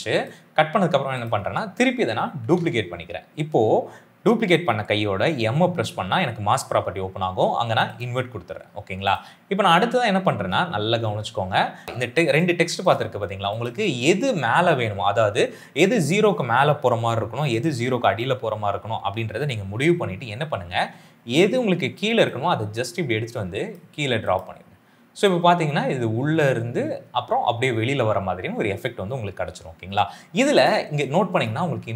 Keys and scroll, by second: 2.3 ctrl+d, 5.2 m.